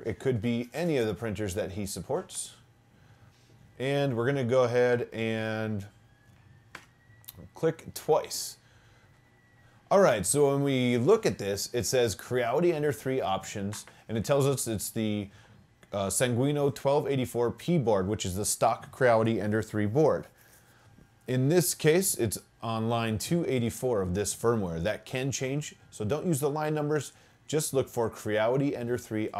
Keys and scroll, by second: 2.3 Return, 6.8 Return.